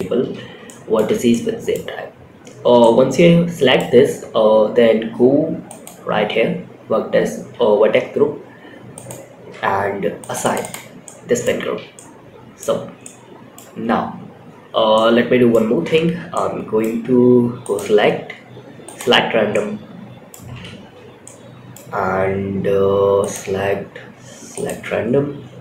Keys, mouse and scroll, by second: 0.6-1.0 middle drag, 1.2 scroll up 2, 2.1-3.1 middle drag, 5.0 click, 8.2 click, 9.5 click, 9.7 click, 9.9 click, 10.3 middle click, 10.9 Tab, 11.2 middle click, 12.0 scroll up 1, 12.3-12.9 middle drag, 14.2 scroll up 1, 14.3 middle click, 15.0 Tab, 15.6 middle click, 16.9-18.3 drag, 18.8 middle click, 20.1 3, 20.5 middle click, 22.5-24.0 drag.